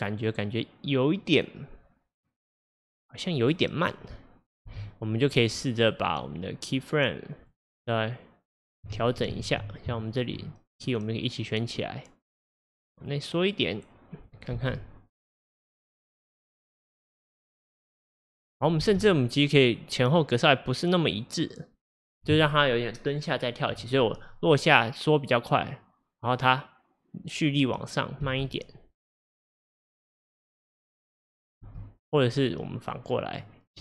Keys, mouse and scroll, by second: 4.7 space, 5.0-9.5 drag, 9.5 ctrl+z, 10.1 shift+click, 10.9-14.6 drag, 14.6 space, 18.9 space, 20.1-27.7 drag, 28.3 space, 31.7 space, 32.1-33.8 drag.